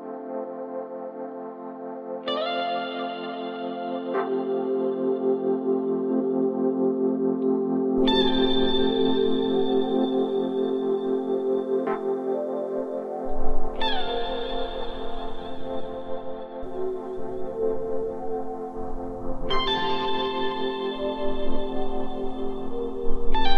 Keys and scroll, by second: 1.6 2, 4.5 ctrl+z, 17.0 4.